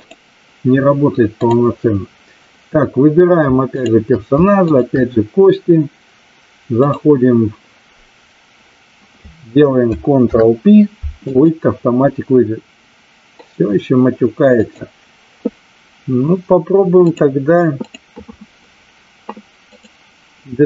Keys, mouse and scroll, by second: 4.6 shift+click, 6.8-8.6 drag, 14.5 click, 16.9 click, 17.8-19.9 drag.